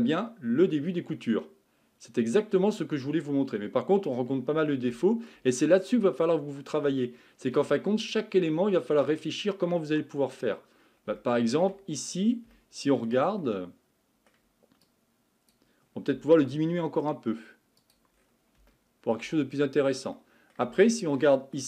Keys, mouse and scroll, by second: 0.0-3.0 middle drag, 4.9 shift+middle click, 5.6-6.2 scroll up 6, 6.2-10.8 middle drag, 10.8-11.2 scroll down 3, 11.2-11.9 shift+middle drag, 11.9-12.5 scroll up 6, 12.5-14.8 shift+middle drag, 14.8-16.4 drag, 16.4 s, 18.2-18.7 scroll down 4, 18.7 shift+middle click, 19.4-20.1 scroll up 4, 20.1-21.6 middle drag.